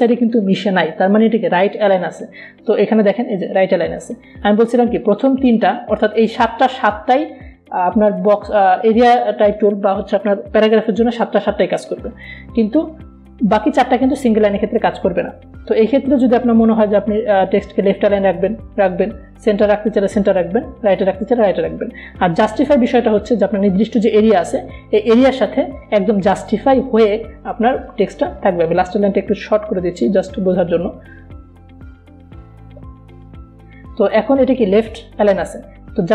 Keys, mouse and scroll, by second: 4.1 click, 18.7 click, 21.3 click, 29.4-33.5 drag, 33.5 BackSpace.